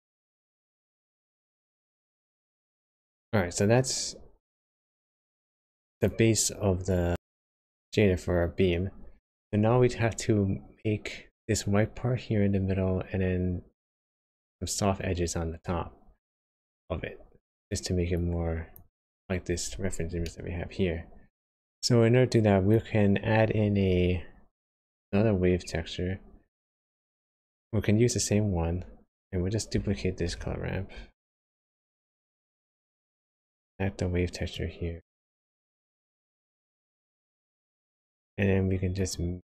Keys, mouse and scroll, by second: 1.3 middle click, 5.3 click, 6.9 click, 7.1 click, 16.5 click, 17.5 click, 18.1 click, 20.2 shift+middle click, 21.5 shift+scroll up 1, 21.7 click, 22.3 click, 24.5 click, 26.9 middle click, 27.6-27.9 scroll up 2, 27.9 scroll down 1, 28.5-29.1 scroll down 2, 29.1 click, 30.3 shift+d, 32.6 click, 34.5 click, 36.5 middle click, 37.8-38.3 scroll up 1, 39.0 click.